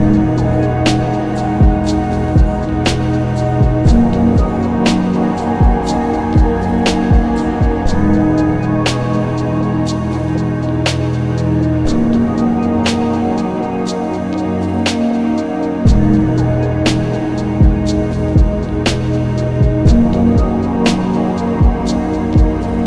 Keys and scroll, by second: 4.1 ctrl+alt+z, 13.2 ctrl+z, 14.1 alt+z, 14.5 alt+z.